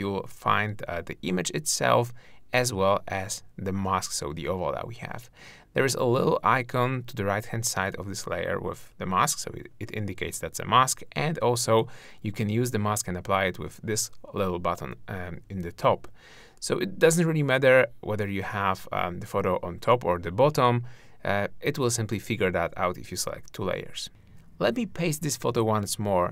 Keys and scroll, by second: 16.8 super+0, 17.6 super+space, 24.6 super+v.